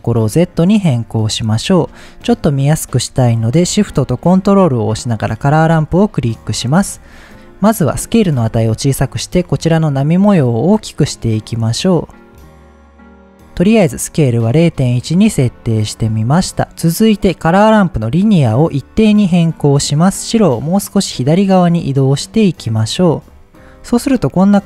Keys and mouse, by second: 5.3 ctrl+shift+click, 7.1 middle click, 10.8-13.4 drag, 15.6-16.6 middle drag, 18.2-19.1 drag, 20.1-22.8 drag, 24.5-24.6 middle drag.